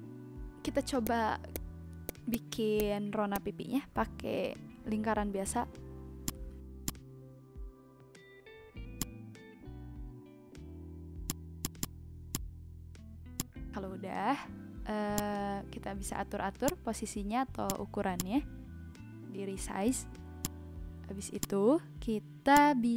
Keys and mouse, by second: 1.0 click, 1.5 click, 2.0 click, 2.7 click, 3.3 click, 6.2 click, 8.9 click, 11.2 click, 13.3 click, 15.1 click, 16.6 click, 17.5 v, 17.6 click, 20.4 click, 21.3 alt+click, 22.5 click.